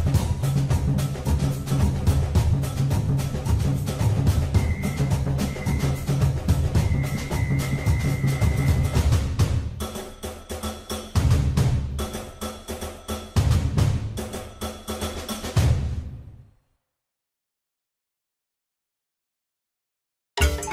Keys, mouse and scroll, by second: 5.2 click, 10.2 click, 16.5 KP_3, 19.0 click.